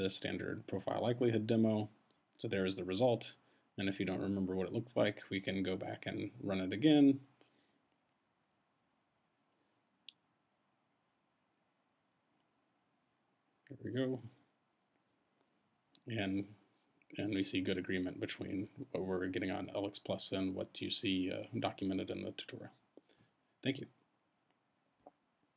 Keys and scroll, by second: 7.4 Up, 14.9 Return.